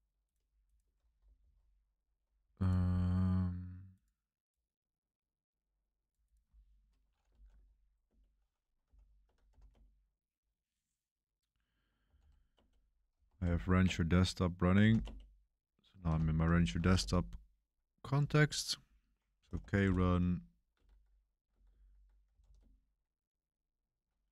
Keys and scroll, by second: 1.3 ctrl+c, 7.0-10.0 typing, 8.0 Return, 11.9-16.9 typing, 16.0 ctrl+l, 19.1-22.9 typing.